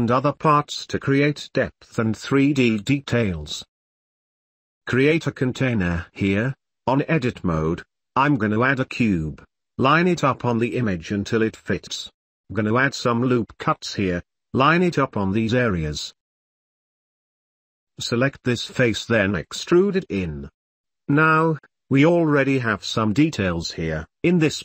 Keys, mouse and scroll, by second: 0.3 shift+Tab, 0.6 shift+middle click, 0.9 click, 0.9 2, 1.1 k, 1.3 3, 1.4 shift+middle click, 1.7 shift+middle click, 1.9 shift+middle click, 2.2 shift+g, 2.8 ctrl+z, 2.9 ctrl+z, 3.0 shift+middle click, 3.4 e, 3.7 ctrl+s, 5.5-6.9 drag, 8.7 s, 10.6 shift+click, 11.0 ctrl+s, 11.2 g, 11.7 click, 12.1 Tab, 12.3 Tab, 12.3 click, 12.4 g, 12.6 Tab, 12.6 click, 12.8 Tab, 12.8 l, 13.1 click, 13.1 ctrl+s, 13.2 Tab, 13.5 ctrl+r, 16.5 ctrl+r, 16.7 ctrl+r, 16.8 click, 17.0 ctrl+r, 17.4 ctrl+middle click, 17.4 ctrl+s, 17.8 middle click, 18.1 ctrl+s, 18.3 shift+middle click, 18.4 shift+middle click, 18.7 ctrl+r, 19.4 e, 20.1 Tab, 20.4-22.7 middle drag, 22.8 shift+drag, 23.0 shift+middle click, 23.8 middle click, 24.0 middle drag, 24.4 middle click.